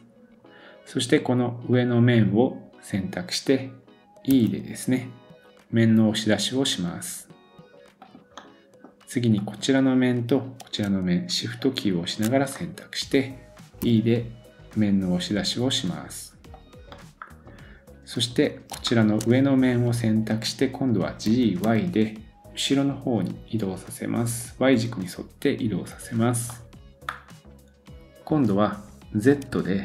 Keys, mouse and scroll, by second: 1.7 click, 4.3 e, 8.4 middle click, 9.3 click, 11.6 shift+click, 12.4-18.7 middle drag, 13.8 e, 18.4 scroll up 2, 18.8 shift+middle click, 19.7 click, 19.8-27.5 middle drag, 21.3 g, 27.5-28.8 scroll down 1.